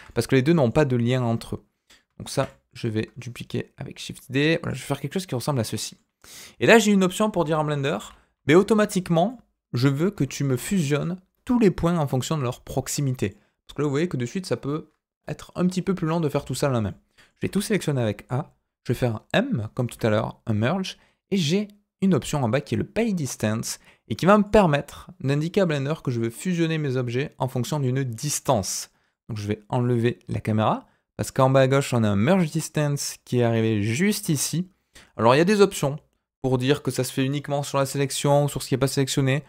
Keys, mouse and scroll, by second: 0.1 shift+middle click, 1.3-2.0 scroll down 1, 2.3 shift+d, 4.9-6.0 middle drag, 7.4 a, 7.9 a, 9.2-10.4 middle drag, 10.5 scroll up 1, 10.8 shift+middle click, 13.2 middle click, 14.5-16.8 scroll down 1, 16.8 middle click, 17.4 a, 19.8 m, 32.1 click.